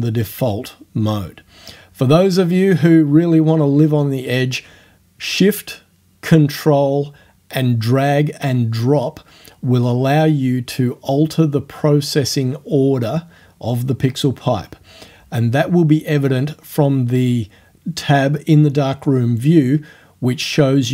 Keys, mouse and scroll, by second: 1.2 click, 5.1-7.2 ctrl+shift+drag, 9.7-11.0 ctrl+shift+drag, 13.8 click, 15.0-16.7 ctrl+shift+drag, 18.1 click.